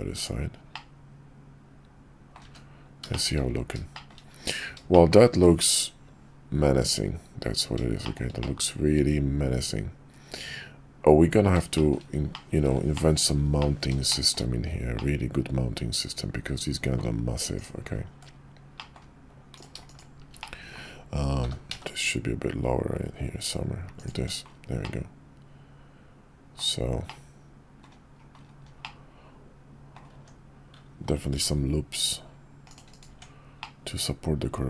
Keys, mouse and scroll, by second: 0.1-0.7 drag, 0.7-2.3 middle drag, 3.1 shift+middle drag, 3.9 shift+middle click, 4.9 shift+middle click, 8.0 shift+middle drag, 8.4-11.5 middle drag, 11.7 shift+middle drag, 12.3-12.7 middle drag, 12.9 shift+middle click, 13.6-13.9 middle drag, 14.0 shift+middle click, 14.9-16.9 middle drag, 18.1 Tab, 18.7 middle click, 20.4 middle click, 21.4 g, 24.1 Tab, 24.8-26.6 drag, 27.0-27.8 drag, 28.8-29.9 middle drag, 30.1 Tab, 31.3 ctrl+r, 33.1 Tab, 33.6-34.6 middle drag.